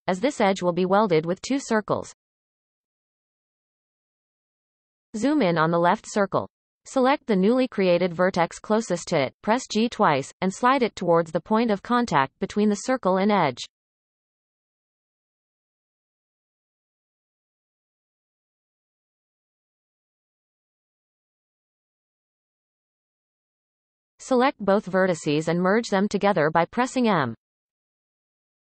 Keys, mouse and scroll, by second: 0.1 right click, 2.0-4.0 drag, 4.0-4.6 scroll up 1, 4.6-5.1 shift+middle drag, 5.1-5.8 scroll up 3, 5.8-6.2 shift+middle drag, 6.2-7.8 scroll up 1, 7.8-8.2 shift+middle drag, 8.2-8.7 scroll up 1, 8.7-9.0 shift+middle drag, 9.0-9.7 scroll up 4, 9.7-10.9 shift+middle drag, 10.9 click, 11.5-12.0 shift+middle drag, 12.0-13.3 scroll up 1, 13.3 g, 14.8-15.3 scroll up 1, 15.3 shift+middle click, 15.8 scroll up 1, 16.3 shift+middle click, 19.6 g, 22.0 shift+click, 22.4 shift+click, 23.2 shift+drag, 24.4-25.2 drag, 26.7 m.